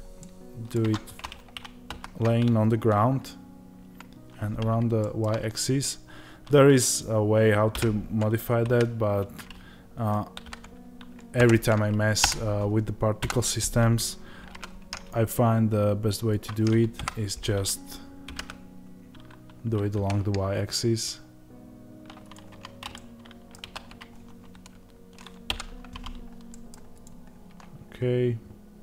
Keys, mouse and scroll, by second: 0.1-22.4 middle drag, 0.7 Tab, 5.2 scroll down 1, 7.7 r, 12.2 Return, 22.4 Tab, 22.9-27.0 middle drag, 23.6 ctrl+s, 25.4 KP_Divide, 27.0 click.